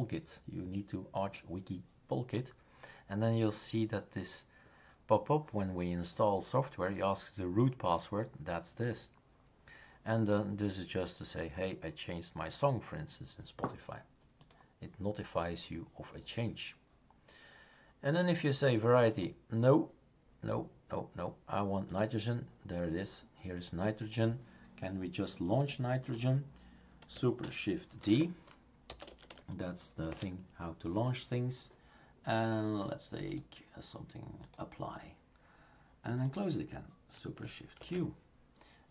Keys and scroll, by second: 28.0 shift+super+d, 28.6-29.8 typing, 30.1 Return, 37.8 shift+super+q.